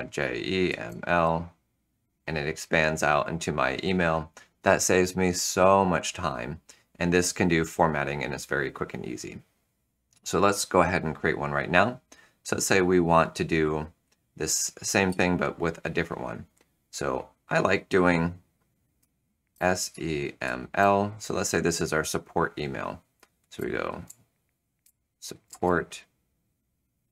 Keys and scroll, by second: 0.0-1.3 typing, 15.0 super+\, 19.5 shift+s, 19.8 e, 20.4 m, 20.7 l, 23.3-26.1 typing.